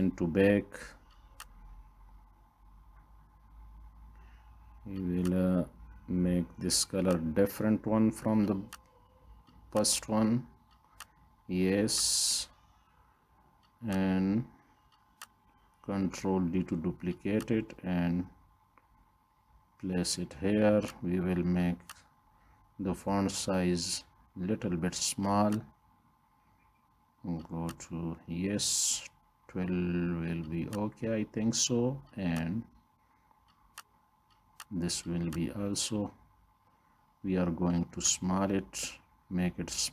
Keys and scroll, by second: 16.3 ctrl+d.